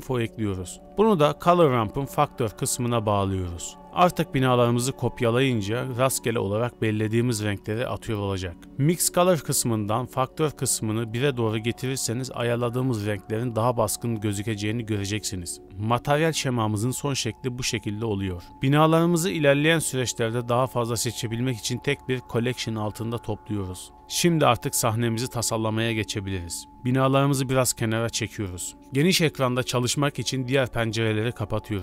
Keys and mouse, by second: 2.6 click, 2.8-5.0 drag, 5.7-7.6 middle drag, 9.4-9.9 middle drag, 9.9 drag, 10.5 shift+d, 12.0 click, 12.5-13.0 drag, 14.4 shift+d, 18.0 g, 18.0 a, 18.2 click, 18.9 b, 19.6 m, 24.2 Return, 25.6 g, 27.5 shift+s.